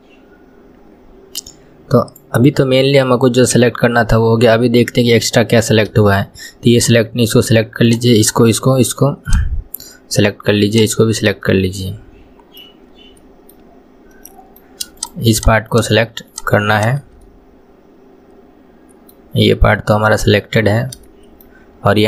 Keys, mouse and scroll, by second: 3.4 scroll down 1, 3.4-6.8 middle drag, 6.8 shift+click, 7.9 shift+click, 8.2 shift+click, 9.3 shift+click, 10.7 shift+click, 11.5-12.9 middle drag, 12.9 scroll up 2, 13.2-15.0 middle drag, 15.0 shift+click, 15.4 shift+click, 15.7 shift+click, 16.3 shift+click, 16.8 shift+click, 17.3-22.0 middle drag.